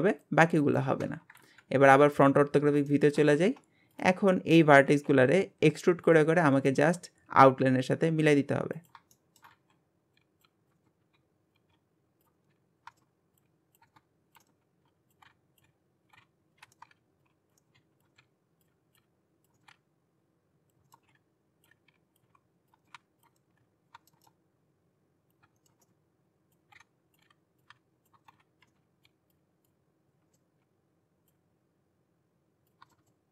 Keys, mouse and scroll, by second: 1.4 KP_1, 2.5-2.9 scroll up 1, 2.9 shift+middle click, 3.4 Tab, 3.9 click, 4.4-4.9 scroll up 1, 4.9 g, 6.4 scroll down 1, 6.7 shift+middle click, 7.2 e, 9.1 shift+middle click, 9.5 e, 10.8 shift+middle click, 11.0 e, 12.4 shift+middle click, 12.5-15.2 typing, 12.9 scroll down 4, 12.9 shift+middle click, 13.9 shift+middle click, 14.4 shift+middle click, 14.5 scroll up 2, 16.6 alt+z, 16.8 shift+middle click, 16.9 e, 17.6 shift+middle click, 17.8 e, 18.1 shift+middle click, 18.2 e, 19.6 shift+middle click, 19.7 e, 20.8 scroll up 1, 20.9 shift+middle click, 21.1 g, 22.8 shift+middle click, 22.9 e, 23.3 shift+middle click, 23.6 e, 23.9-24.7 scroll down 4, 24.0 shift+middle click, 24.7 click, 25.6 shift+middle click, 25.7 scroll up 6, 25.9 shift+middle click, 26.3 click, 26.7 e, 28.1 scroll down 1, 28.2 shift+middle click, 28.3 e, 28.7 shift+middle click, 28.8 e, 30.2 scroll down 3, 30.3 shift+middle click, 30.5 scroll up 2, 30.6 e, 32.8 scroll up 4, 32.9 shift+middle click, 33.1 shift+middle click.